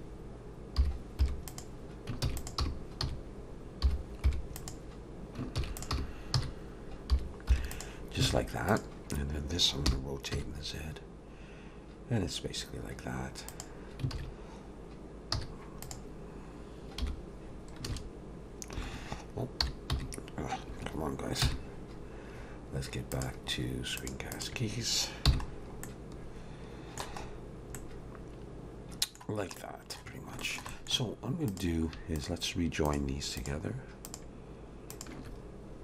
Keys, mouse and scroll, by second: 2.2 shift+d, 2.7 r, 5.6 shift+d, 5.9 r, 8.3 alt+a, 8.7 click, 9.8 r, 14.1 alt+a, 15.3 z, 17.0 /, 17.5-17.8 scroll down 2, 18.8 alt+a, 25.3 n, 25.5-25.8 scroll down 2, 25.8 middle click, 27.2-27.8 scroll up 1, 27.8 middle click, 27.8-28.4 scroll up 2, 29.6 middle click, 30.4 shift+middle click, 30.7 middle click, 31.5 click, 32.2 shift+click, 32.9 click, 34.0 click, 34.9 shift+click.